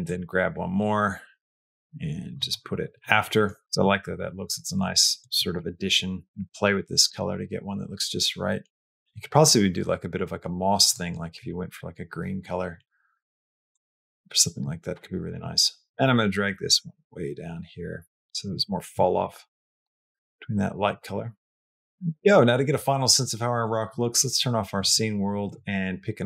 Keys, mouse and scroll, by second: 0.0 click, 0.7-2.2 drag, 3.3 middle click, 15.9-18.4 drag, 18.5 middle click, 19.1 middle click, 20.0 middle click, 23.5-26.2 drag.